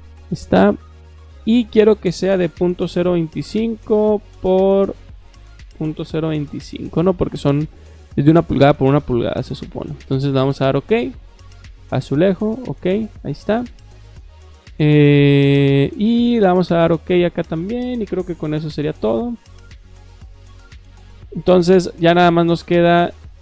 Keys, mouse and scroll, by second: 0.0 click, 0.9 click, 1.3 click, 4.1 click, 4.9 click, 10.6 click, 12.3 click, 16.5 click, 18.3 click, 20.0 click, 22.2 Escape, 22.4 Escape, 22.5 Escape, 22.9-23.4 drag.